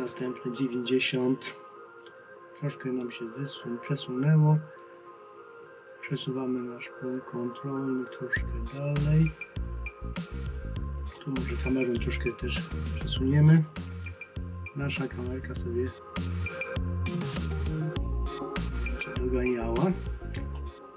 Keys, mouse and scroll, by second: 0.1 click, 6.2 click, 9.5-10.8 scroll down 1, 20.6 middle click.